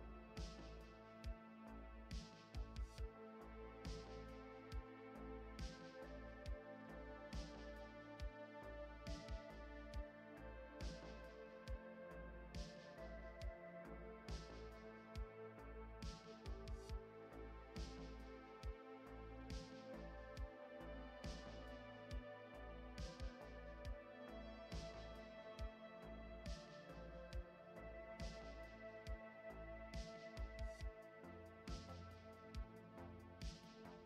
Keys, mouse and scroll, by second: 2.1 click, 2.6 click, 3.3 middle click, 5.7 click, 6.5 click, 8.8 right click, 13.2 click, 19.9 middle click, 23.2 click, 28.1 right click, 32.8 click.